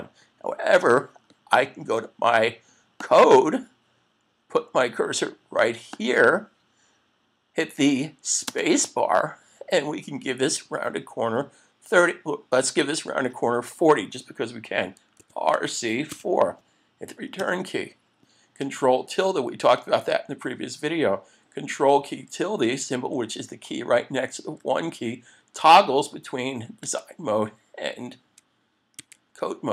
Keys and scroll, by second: 17.4 Return, 26.9 ctrl+`, 29.0 ctrl+`.